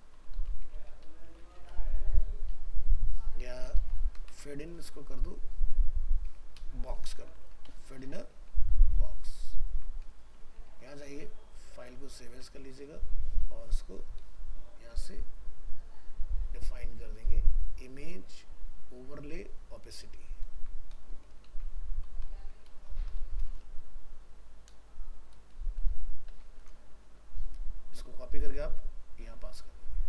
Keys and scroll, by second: 4.3 ctrl+shift+Left, 8.7 ctrl+s, 10.6 alt+f, 10.7 alt+移, 12.3 ctrl+Tab, 20.6 ctrl+shift+Right, 26.6 ctrl+c.